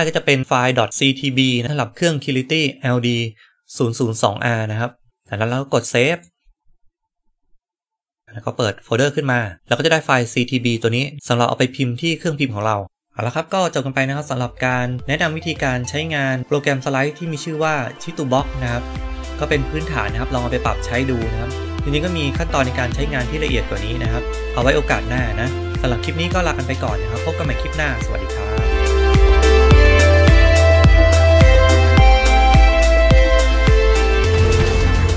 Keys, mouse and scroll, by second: 6.0 click.